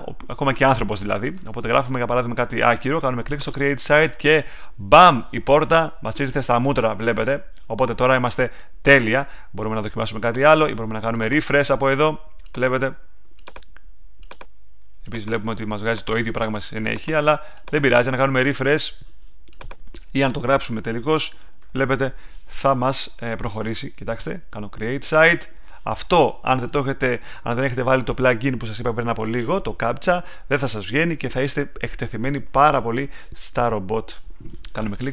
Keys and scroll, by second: 1.0-2.3 typing, 20.6-22.2 typing.